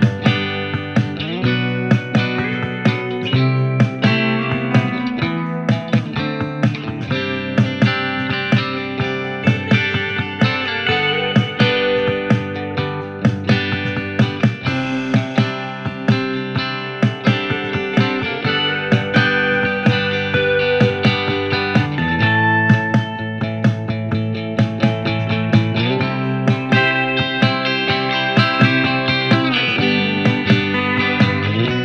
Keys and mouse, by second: 9.8 ctrl+r.